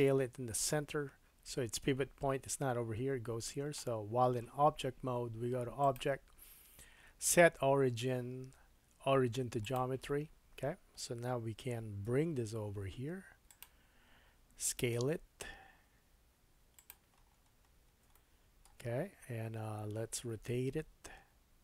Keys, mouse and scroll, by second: 5.8 click, 8.8-17.8 drag, 12.1 g, 14.7 s, 17.1-18.0 scroll up 6, 18.1 shift+middle click, 20.3 r.